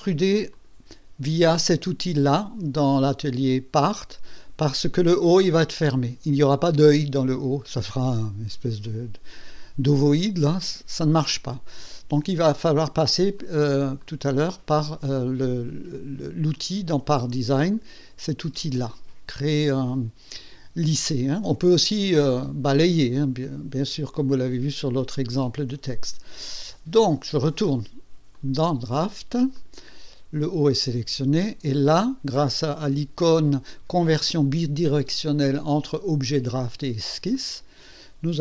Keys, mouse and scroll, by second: 0.5 click, 13.4 click, 14.0 click, 16.5 click, 17.6 click, 18.1 click, 27.4 click, 28.3 click, 29.6 click, 37.3 click.